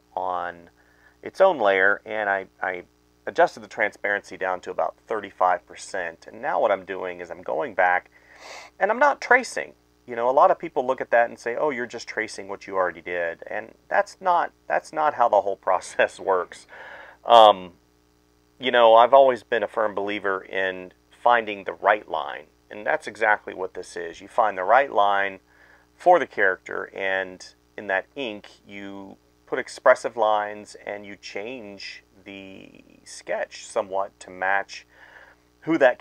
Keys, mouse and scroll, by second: 0.3 space, 0.6 ctrl+z, 1.5 space, 2.7 space, 3.1 space, 3.4 space, 3.5 ctrl+z, 4.4 right click, 5.3 space, 5.5 space, 5.9 space, 6.4 ctrl+z, 7.1 space, 8.0 space, 8.3 space, 8.6 space, 9.0 ctrl+z, 9.8 space, 10.6 space, 10.9 ctrl+z, 11.3 space, 11.5 right click, 12.3-15.0 typing, 16.1-19.1 typing, 17.4 ctrl+z, 19.7 ctrl+z, 20.0 ctrl+z, 20.2-23.0 typing, 24.3-26.7 typing, 27.4 right click, 27.6 ctrl+z, 27.7 right click, 28.2-30.7 typing, 28.2 ctrl+z, 31.9 ctrl+z, 32.7 space, 32.7 ctrl+z, 33.4 space, 33.9 space, 34.4 space, 35.7 space.